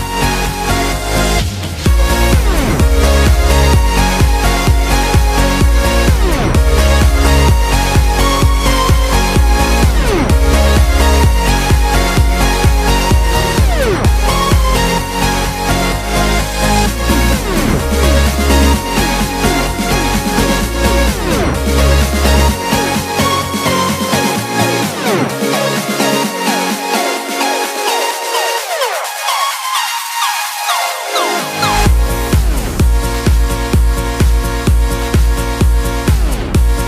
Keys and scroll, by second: 3.3 Return, 4.9 super+=, 5.1 super+=, 6.6 super+-, 7.1 super+=, 10.0 b, 22.4 x, 24.9 x, 32.8 x.